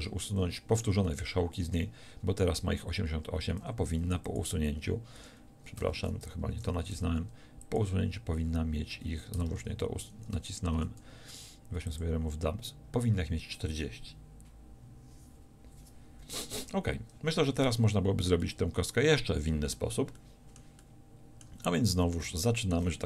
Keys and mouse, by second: 0.0 a, 3.7 w, 5.2 w, 6.5 ctrl+z, 7.0 w, 9.1 Escape, 9.5 ctrl+z, 10.8 w, 17.7 Tab.